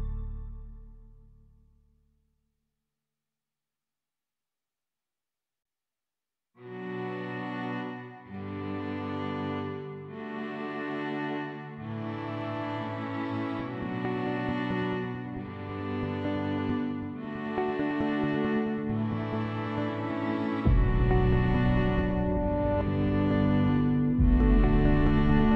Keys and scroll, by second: 7.5 ctrl+s.